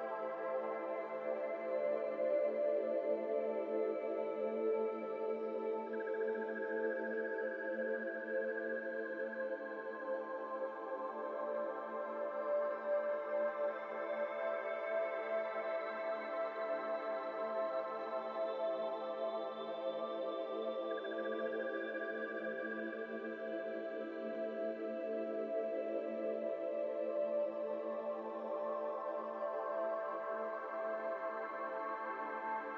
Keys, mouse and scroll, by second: 0.3 alt+click, 0.9 e, 2.9 KP_1, 3.5 alt+z, 3.8 g, 5.0 z, 5.1 z, 5.2 g, 6.4 g, 7.3 f, 7.7 middle click, 8.0 alt+z, 8.2 middle click, 8.5-8.9 shift+scroll down 5, 8.6 Tab, 8.9 middle click, 9.3 click, 9.6 middle drag, 9.8 scroll up 2, 10.1 click, 10.1 Tab, 10.6 shift+middle click, 10.8 scroll up 1, 10.9 middle click, 11.4 ctrl+r, 13.7-16.8 drag, 16.8 ctrl+r, 19.5 scroll down 1, 19.6 middle click, 19.9 3, 20.5 alt+click, 21.2 alt+click, 22.2 alt+shift+click, 22.8 ctrl+z, 23.2 alt+shift+click, 23.8 ctrl+z, 23.9 middle click, 24.5 alt+shift+click, 25.3 ctrl+z, 25.6 alt+shift+click, 25.8 alt+shift+click, 26.0 alt+shift+click, 26.4 alt+shift+click, 26.6 alt+shift+click, 26.9 alt+shift+click, 27.4 ctrl+z, 28.0 shift+click, 28.4 middle click, 28.7 alt+z, 29.0 alt+z, 29.8-32.4 middle drag, 32.4 c.